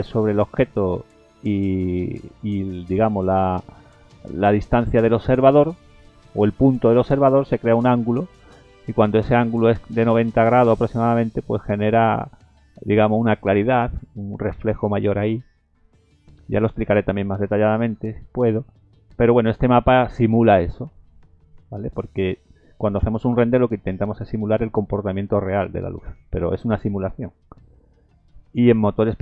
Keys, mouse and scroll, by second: 10.5 scroll up 1, 11.2-12.0 scroll up 3.